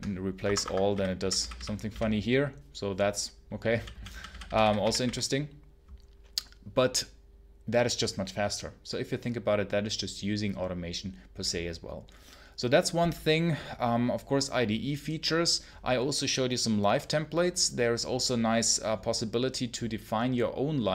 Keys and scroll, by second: 0.3 Escape, 0.5-1.8 typing, 3.3-5.4 typing.